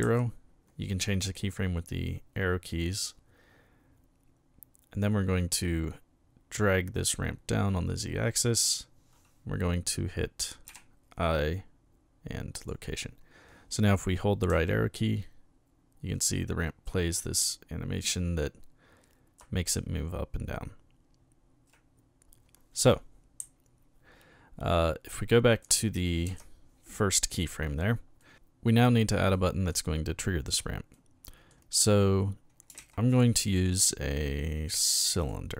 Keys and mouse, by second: 0.0 Right, 5.1-8.6 drag, 12.5 click, 14.5 Right, 17.2 Left, 19.7 Right, 23.4 Left, 26.3 Right, 28.2 middle click, 29.3 middle click, 30.9-31.5 middle drag, 32.8 shift+a, 35.2 click.